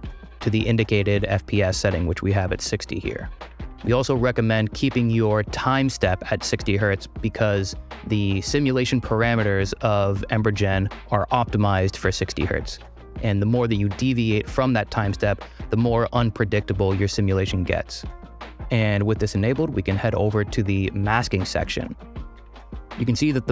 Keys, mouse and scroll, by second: 20.9 click.